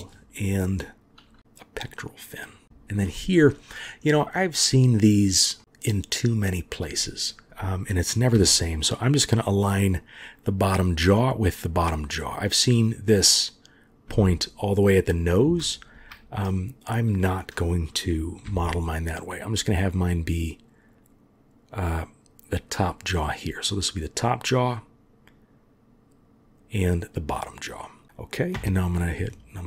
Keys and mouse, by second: 1.4 g, 2.6 shift+click, 5.6 middle click, 6.2-6.9 drag, 8.3 g, 12.7 click, 14.1 g, 18.4 g, 28.5 KP_7.